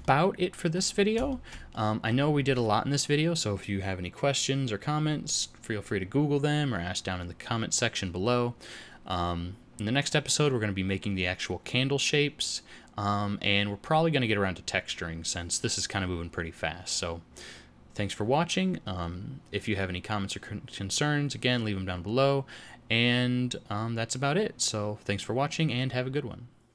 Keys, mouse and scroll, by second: 0.9-1.2 scroll down 2, 1.2 shift+middle click, 1.7 middle click.